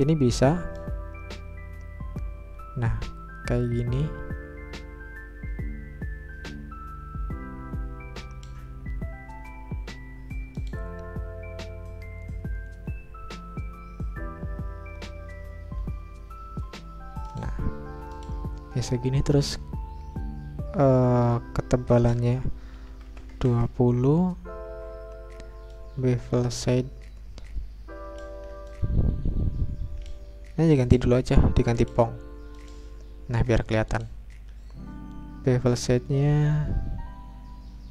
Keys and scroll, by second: 22.7-23.5 typing, 26.0 Return.